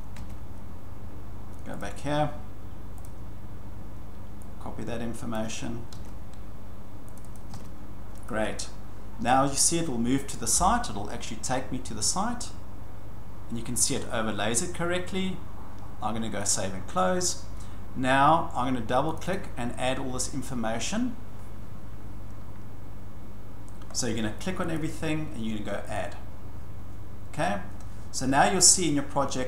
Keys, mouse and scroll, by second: 0.2 ctrl+v, 1.8 click, 3.0 click, 5.3 click, 5.9 ctrl+c, 7.2 click, 7.3 click, 7.5 ctrl+v, 8.3 click, 16.5 click, 19.2 click, 19.3 click, 23.9-24.3 scroll, 24.8 click, 25.9 click.